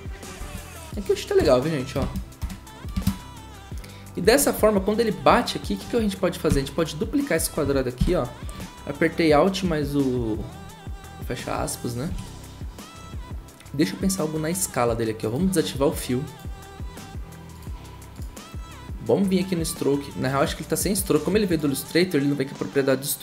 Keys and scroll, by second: 1.4 0, 2.4 typing, 6.5 ctrl+d, 8.0 alt+], 12.1 s.